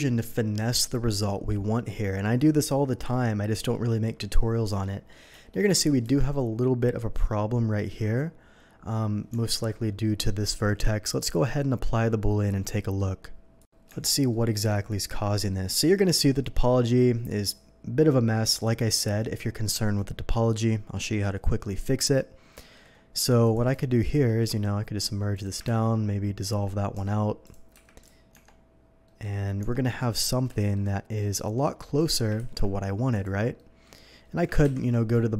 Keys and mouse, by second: 6.0 Tab, 9.3 Tab, 13.9 Tab, 16.7-30.0 drag, 24.4 1, 25.6 ctrl+x, 26.4 Tab, 27.0 Tab, 27.7 q, 28.3 Tab, 29.6 q, 30.1 click, 32.4 ctrl+x, 34.6 ctrl+KP_7, 35.3 shift+7.